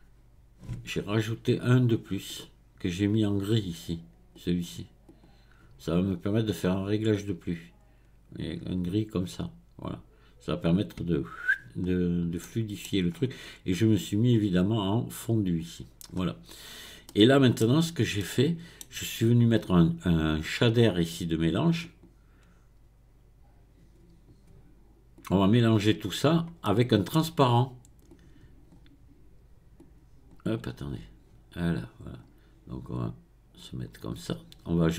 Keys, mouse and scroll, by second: 2.3-4.5 drag, 5.1 click, 11.8 scroll down 1, 12.4-13.1 middle drag, 13.1 scroll up 4, 14.3-16.1 drag, 16.1-16.7 scroll down 5, 17.1 middle click, 17.8-18.2 scroll down 2, 18.2-21.2 middle drag, 21.8-24.9 drag, 26.7-28.1 middle drag, 28.1-30.9 drag, 31.8-33.0 drag.